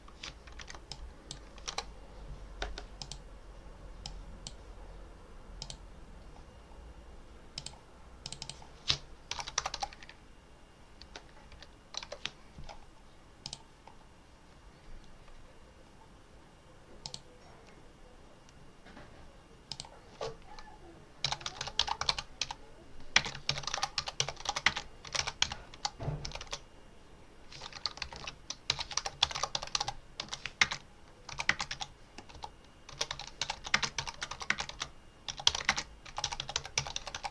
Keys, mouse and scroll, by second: 0.5-2.0 typing, 0.7 click, 2.9 click, 3.9 click, 5.5 click, 7.4 click, 8.1 click, 9.0-10.2 typing, 10.9 Down, 11.9 Return, 13.3 click, 16.9 click, 19.5 click, 20.9-26.8 typing, 27.9 Left, 28.4-37.3 typing.